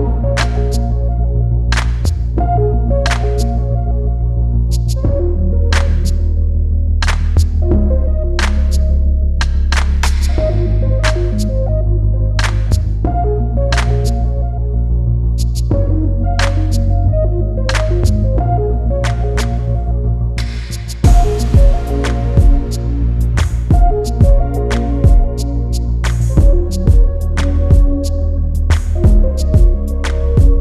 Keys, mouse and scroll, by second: 0.2-1.7 drag, 2.2-4.4 drag, 5.4 click, 6.2 click, 7.1 click, 7.5-8.5 scroll up 4, 8.5 click, 11.5 click, 12.5-14.2 scroll down 3, 14.2 shift+a, 20.1 g, 28.2 click, 30.3 click.